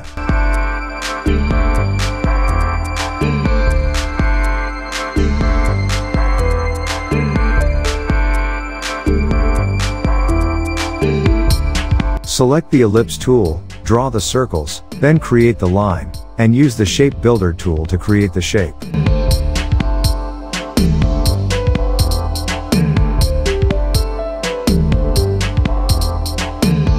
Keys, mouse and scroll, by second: 10.0 space, 10.1-10.5 click, 10.4 space, 11.1-12.3 drag, 12.7 alt+scroll up 1, 13.0 space, 13.3 drag, 20.4 ctrl+c, 20.6 ctrl+f, 21.4-23.0 drag, 26.0 space, 26.1-26.6 click, 26.4 space, 26.9 alt+scroll down 2.